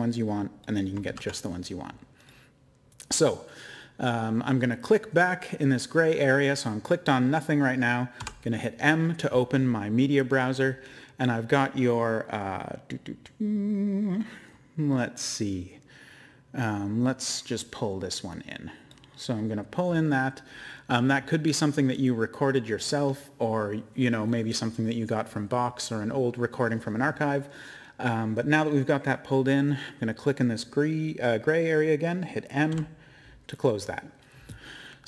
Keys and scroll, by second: 1.0 ctrl+z, 8.2 m, 32.7 m.